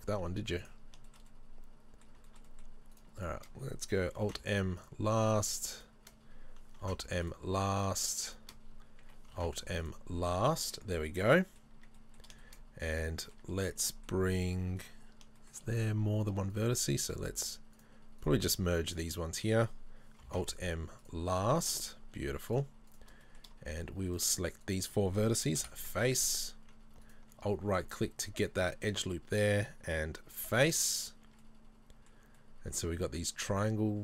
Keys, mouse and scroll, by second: 0.2-2.8 middle drag, 0.2 z, 3.2 shift+right click, 4.3 alt+m, 5.3 right click, 5.8 shift+right click, 6.9 alt+m, 7.8 right click, 8.1 shift+right click, 8.3 shift+right click, 9.4 alt+m, 10.1-10.5 scroll down 1, 10.6 middle click, 10.9 Tab, 11.8 Tab, 12.0 middle click, 12.4 shift+middle click, 13.0 middle click, 14.3-14.8 scroll up 1, 14.8 right click, 15.4-15.7 scroll up 1, 15.9 middle click, 15.9-16.5 scroll up 1, 16.8 shift+right click, 18.9 shift+right click, 20.3 alt+m, 21.6 shift+middle click, 22.0-22.5 scroll down 2, 22.5 right click, 22.9 shift+right click, 23.3 middle click, 24.1 shift+right click, 24.7 shift+right click, 25.7 f, 25.8 scroll down 1, 26.2 middle click, 27.1 alt+right click, 27.5 scroll down 1, 27.9-30.8 shift+middle drag, 30.4 f, 31.3 Tab, 31.5 middle click.